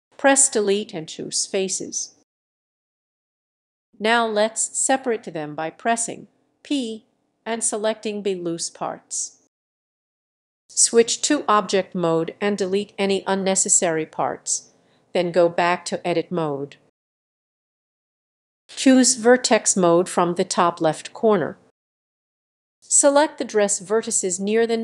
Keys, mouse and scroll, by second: 0.0 ctrl+click, 0.8 Delete, 3.5-6.8 drag, 6.8 p, 7.8-13.1 drag, 13.1 Delete, 14.1-19.1 drag, 19.1 middle click, 19.8-21.4 drag, 21.4-22.6 middle drag, 22.6-24.8 drag.